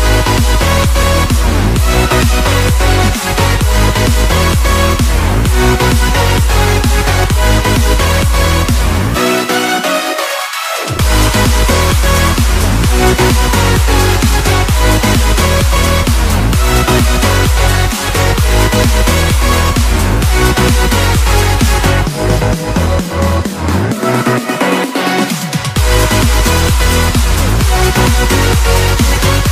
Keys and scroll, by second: 1.0 ctrl+z, 9.3 ctrl+z, 13.0 ctrl+-, 13.8 ctrl+=, 14.9 space, 19.9 ctrl+-, 21.4 ctrl+=, 21.7 ctrl+z, 28.4 space.